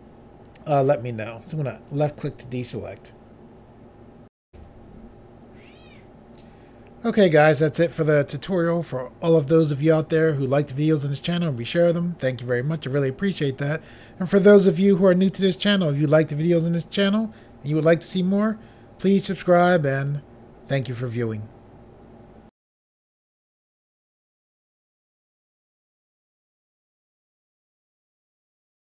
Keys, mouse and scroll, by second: 2.0 click, 2.1 click, 4.5 Pause.